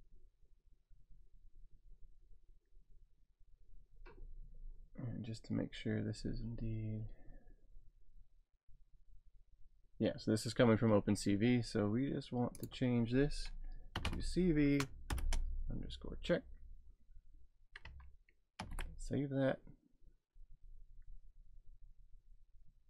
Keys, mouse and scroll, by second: 12.6 click, 13.7-15.1 typing, 18.6 ctrl+s.